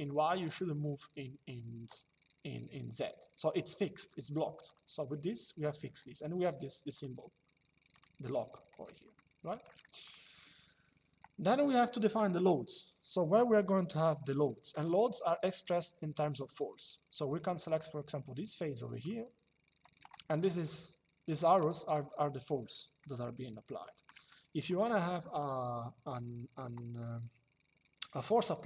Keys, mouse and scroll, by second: 4.4 click, 6.7 click, 9.7 click, 14.4 click, 18.7 click, 20.3 shift+middle click, 22.7 shift+middle click, 24.0 middle click.